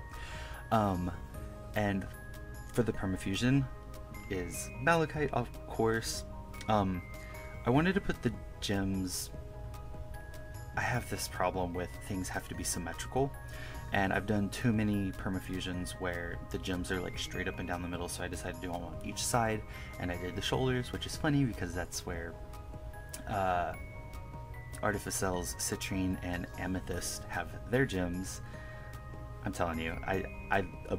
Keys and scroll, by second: 0.7 KP_Add, 1.5 1, 2.7-3.6 typing, 4.7 KP_Add, 7.1 1, 7.8 1, 9.9 1, 10.8 1, 11.5 1, 11.8 1, 12.3 KP_Subtract, 12.5 KP_Subtract, 14.0 1, 14.5 1, 17.9 KP_Subtract, 21.3 1, 21.8 KP_Subtract, 23.9 1, 24.6 1, 28.1 1, 30.4 KP_Subtract, 30.4 KP_Add, 30.9 KP_Subtract.